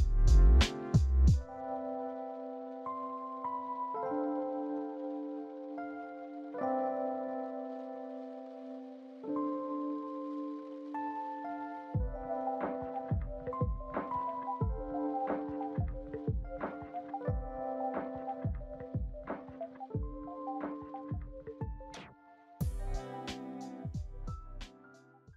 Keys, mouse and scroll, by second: 2.7 alt+Tab, 9.5-10.7 scroll down 16, 11.1 middle click, 11.2 middle click, 11.7 F4, 12.2 alt+F4, 12.3 alt+middle click, 12.6 alt+middle click, 16.2 alt+middle click, 17.5 double click, 17.9 double click, 18.3 middle click, 21.0 double click, 21.1 double click, 23.3 middle click.